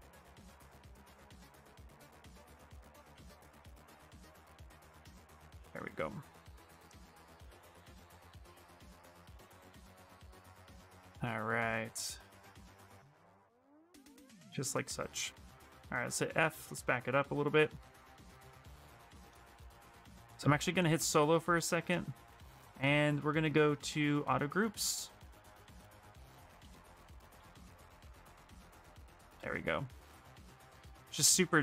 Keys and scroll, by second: 3.4 q, 7.7 w, 13.9 q, 15.4 f, 16.3 f, 18.5 shift+f, 26.5 f, 26.8 f, 27.1 f.